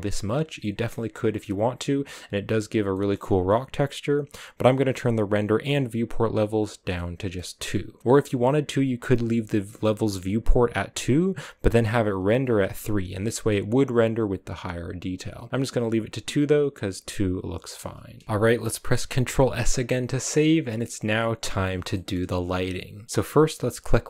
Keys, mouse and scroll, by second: 0.9-2.5 scroll up 1, 2.5-2.8 scroll down 3, 2.8-6.1 middle drag, 6.1 click, 6.9 middle click, 7.3-7.9 scroll up 1, 7.9-15.5 middle drag, 15.5 scroll down 2, 15.6-24.0 middle drag.